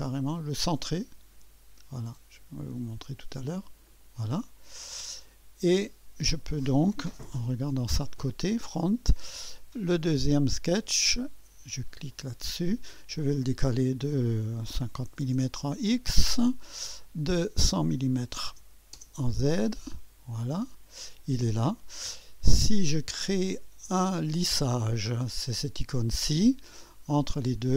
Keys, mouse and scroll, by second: 0.0 click, 2.9 click, 3.9 click, 5.2 click, 6.5 click, 7.2 1, 8.0-12.0 drag, 12.1 click, 13.2-14.8 drag, 14.8-16.2 typing, 17.2 click, 18.1-19.3 typing, 19.7 click, 20.5-20.8 scroll down 1, 22.5 click, 23.2 click, 23.8 typing, 26.9-27.7 drag.